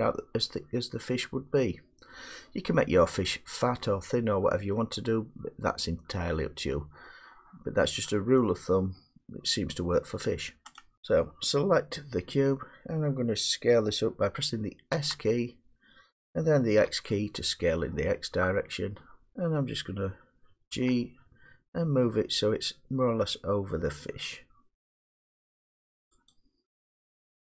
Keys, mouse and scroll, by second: 2.1 middle click, 4.7-10.7 middle drag, 10.7-12.3 drag, 12.9 click, 14.9 s, 16.8 x, 19.3 click, 20.7 g, 26.3 click, 27.1-27.5 drag.